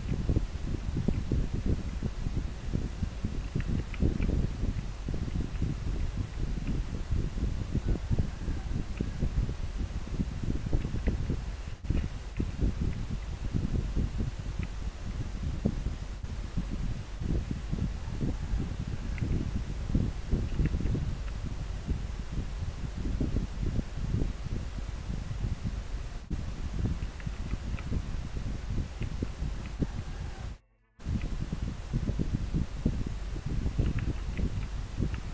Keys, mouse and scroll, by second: 3.9 scroll down 1, 5.1 scroll up 1, 12.9 scroll up 1, 27.5 scroll down 1, 29.7 scroll up 1, 34.4 scroll down 1.